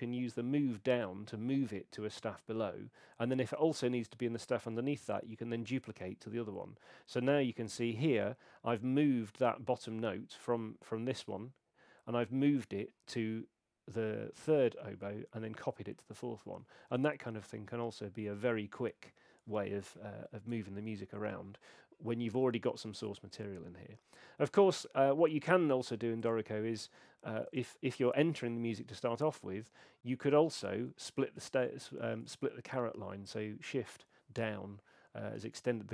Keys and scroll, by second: 0.3 alt+m, 4.9 alt+shift+d, 27.5 Return, 31.0 shift+Down, 31.5 shift+Down.